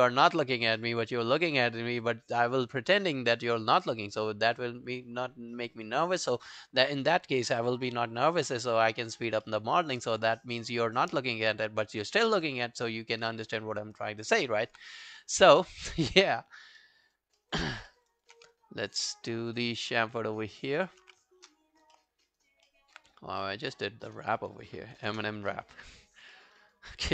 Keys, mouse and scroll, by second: 8.7-9.1 scroll down 3, 9.1 alt+click, 9.5 alt+middle click, 9.8 alt+scroll down 1, 10.0 alt+click, 10.4 alt+middle click, 10.6 alt+right click, 10.8 alt+click, 11.2 alt+middle click, 11.4 alt+right click, 11.6 alt+click, 13.7-14.0 scroll down 3, 14.0 alt+middle click, 14.5 alt+click, 15.4 alt+middle click, 15.6 alt+right click, 15.9 alt+click, 16.3 alt+middle click, 16.6 alt+scroll down 1, 16.8 alt+middle click, 17.0 alt+right click, 17.4 alt+middle click, 17.6 alt+right click, 17.9 alt+middle click, 18.1 alt+right click, 18.4 q, 18.5 right click, 19.7 double click, 20.0 alt+scroll down 1, 20.1 alt+click, 20.5 alt+middle click, 20.7 alt+scroll down 1, 20.8 alt+right click, 21.7 scroll up 1, 22.0 alt+middle click, 22.3 alt+right click, 22.7 alt+middle click, 23.2 right click, 24.6-25.0 scroll down 1, 25.3 ctrl+scroll down 1, 25.5 alt+middle click, 25.8 alt+right click, 26.0 alt+click, 26.3 alt+middle click, 26.6 alt+right click, 26.9 alt+middle click.